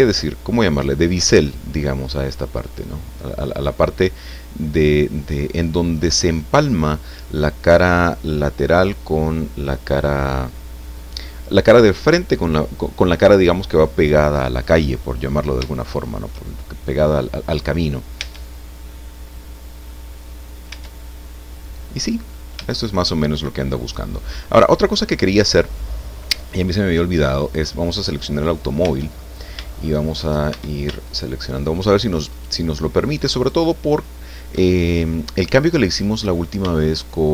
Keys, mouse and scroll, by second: 14.8 click, 16.9 click, 17.4 scroll up 2, 18.2 Tab, 19.0-20.0 drag, 20.0-20.5 scroll down 2, 20.7 Tab, 21.0-22.5 drag, 22.6-24.4 shift+drag, 27.4 right click, 28.8 Tab, 29.6 shift+click, 30.5 shift+a, 31.0 alt+shift+right click, 32.3 alt+shift+right click, 33.4 alt+shift+right click, 34.7-35.1 scroll down 2, 35.1-36.1 middle drag, 36.2-36.6 scroll up 2, 36.7 shift+middle click.